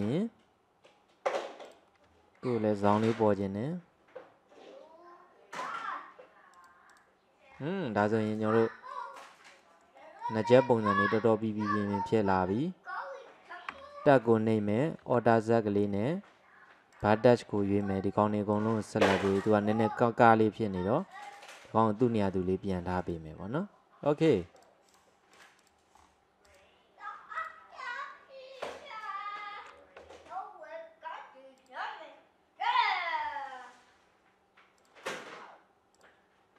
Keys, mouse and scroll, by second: 2.9 ctrl+r, 6.6-7.6 drag, 7.6-8.3 scroll down 5, 8.3 click, 8.7-11.1 middle drag, 11.9-13.7 scroll up 1, 13.7 Tab, 14.1 scroll up 1, 15.1 alt+z, 17.0 click, 17.9 click, 19.9 g, 23.4-24.6 scroll down 1, 24.6 click, 25.4 click, 26.1 scroll down 3, 26.5 click, 27.2 scroll down 1, 27.5 click, 27.7-28.7 scroll up 1, 28.7 Tab, 30.1 r, 33.3 g, 36.0 click.